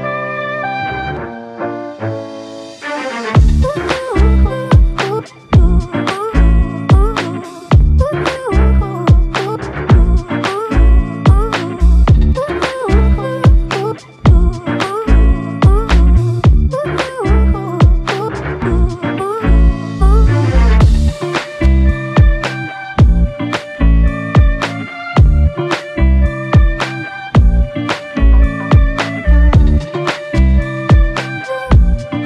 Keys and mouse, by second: 1.1 shift+click, 2.8 alt+m, 3.9 shift+click, 7.2 double click, 15.5 ctrl+click, 16.4 ctrl+i, 21.1 ctrl+i, 28.6 double click.